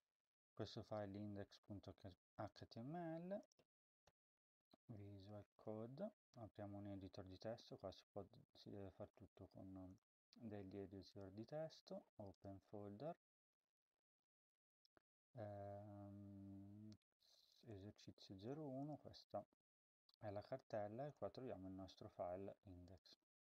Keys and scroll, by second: 3.8-4.5 typing.